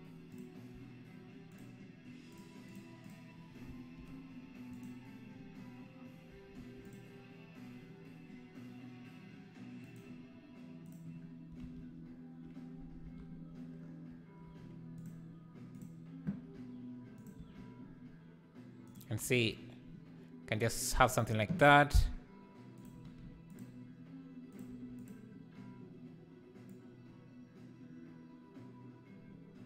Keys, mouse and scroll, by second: 0.4 Left, 1.6 shift+Left, 2.4 shift+Left, 2.6 shift+Left, 2.6 click, 3.0 shift+Left, 3.0 click, 4.8 ctrl+l, 6.9 click, 10.9 click, 11.6 alt+a, 11.9 `, 15.1 click, 15.8 click, 16.3 g, 23.5 click, 25.0 click, 26.7-29.6 drag.